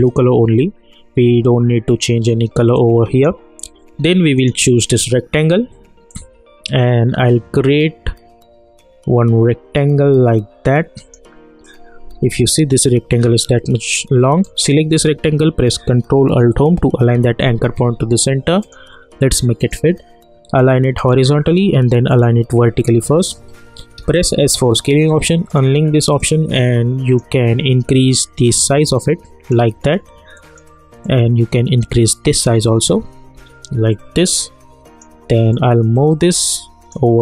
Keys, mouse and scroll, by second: 2.7-11.4 drag, 12.0 scroll down 1, 14.4 click, 16.8 ctrl+alt+Home, 18.7 click, 24.0 s, 25.5-27.5 drag, 27.5 scroll down 1, 28.9-33.3 drag, 33.3 v, 33.9-37.2 drag.